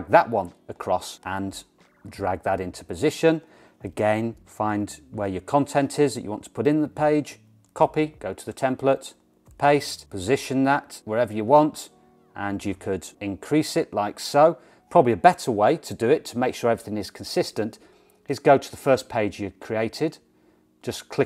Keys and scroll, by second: 8.0 super+c, 9.5 super+v, 16.7 BackSpace.